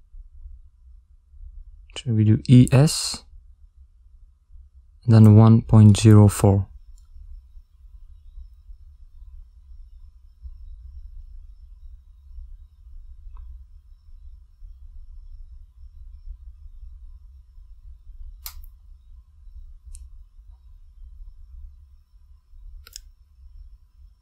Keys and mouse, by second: 0.0 middle click, 1.0 e, 6.4 ctrl+middle click, 7.1 middle click, 10.8 click, 11.7 click, 15.0 click, 16.1 ctrl+middle click, 16.6 middle click, 17.3 ctrl+middle click, 19.5 e, 23.9 middle click.